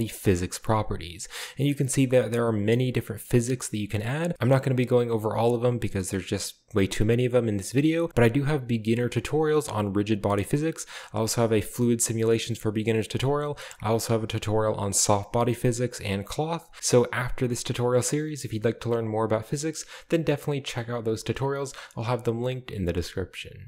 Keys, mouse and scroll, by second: 0.2 click, 0.7-1.3 drag.